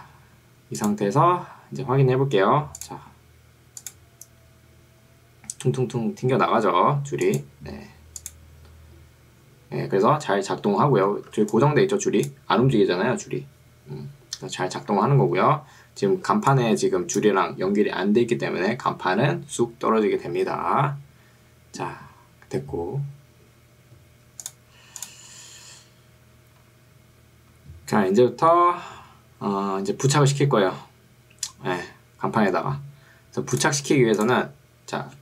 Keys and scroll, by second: 11.5 ctrl+2, 14.9 Escape, 16.3 ctrl+2, 18.1 Escape.